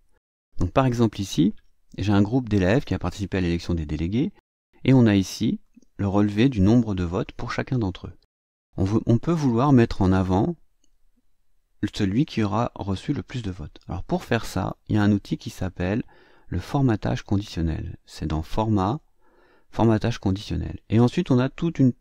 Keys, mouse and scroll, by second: 5.5-7.4 drag, 18.4 click.